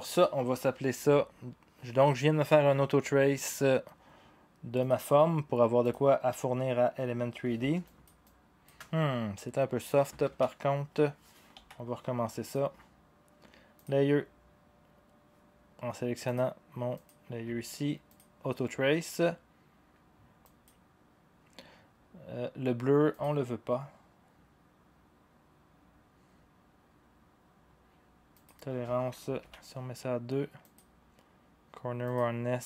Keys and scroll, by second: 10.2-11.5 ctrl+z, 11.5 Delete, 29.4 2.